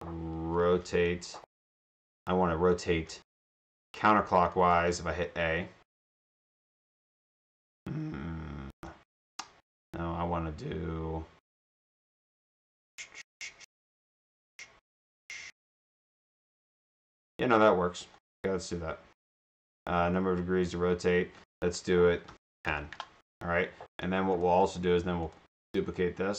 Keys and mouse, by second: 0.0-1.5 typing, 4.5 click, 4.7 click, 8.8 click, 18.2 click, 18.3 click, 24.5 right click, 25.9 right click.